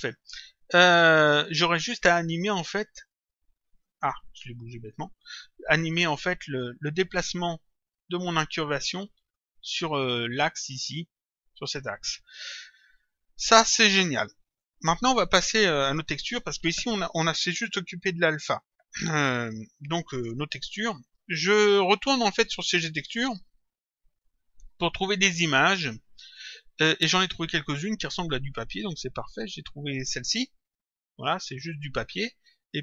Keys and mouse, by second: 1.1 click, 3.1 click, 4.8 click, 6.1 click, 22.5 click, 24.1 click, 26.3 click, 29.8 click.